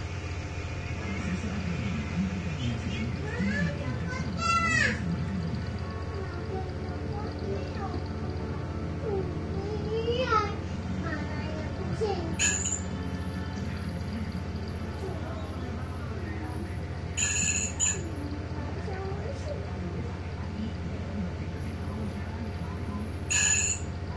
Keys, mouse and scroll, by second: 7.4-7.8 ctrl+scroll up 2, 9.9 click, 10.5 shift+click, 11.4 shift+click, 13.1 click, 14.8-16.1 drag, 19.8-23.6 drag.